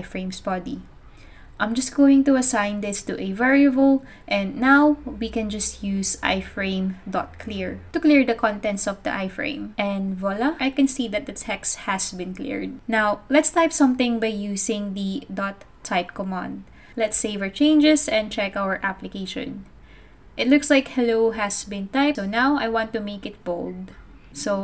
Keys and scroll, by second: 1.1-2.4 typing, 3.8-8.2 typing, 8.4 super+s, 16.1-18.4 typing.